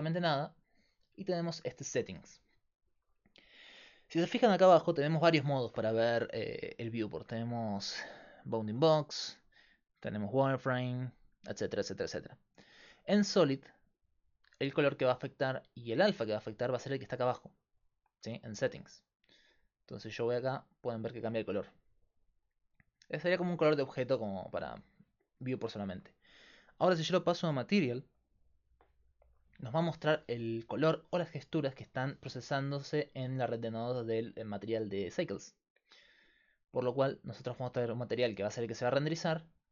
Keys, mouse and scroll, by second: 4.8-6.5 drag, 9.2-14.0 drag, 16.6-25.9 drag, 26.6 click, 28.3 click, 35.5-39.7 drag.